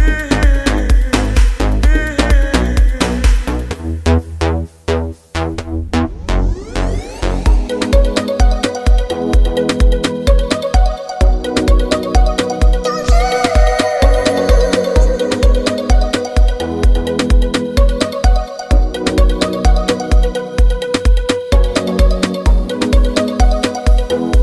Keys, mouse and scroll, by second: 3.7 ctrl+Num_Lock, 3.9 ctrl+f, 7.6-17.9 drag.